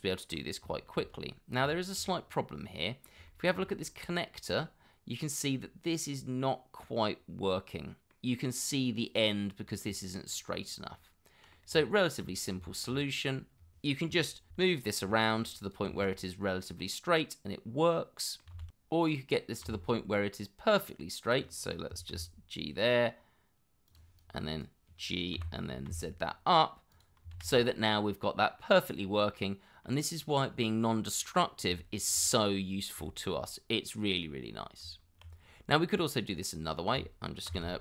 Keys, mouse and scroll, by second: 0.1 shift+middle click, 0.8 middle click, 1.3 shift+middle click, 1.6 scroll up 1, 2.1 shift+middle click, 2.3 scroll up 1, 2.5 middle click, 3.3 shift+middle click, 3.6 scroll up 1, 8.7 middle click, 9.4 scroll up 1, 10.3 scroll down 1, 11.2 scroll up 1, 11.4 middle click, 12.1 Tab, 13.8 Tab, 14.2 shift+z, 16.0 g, 17.1 shift+z, 17.4 middle click, 18.6 shift+z, 19.6 shift+z, 22.1 g, 24.2 double click, 25.3 g, 25.9 z, 27.3 shift+z, 27.7 middle click, 28.9 scroll down 1, 29.3 middle click, 31.4 scroll up 1, 31.8 shift+middle click, 32.7-33.0 scroll down 1, 33.4 scroll up 1, 34.3-34.8 scroll down 1, 34.8 Tab, 35.4-35.7 scroll down 1, 35.7 middle click, 37.5 shift+s.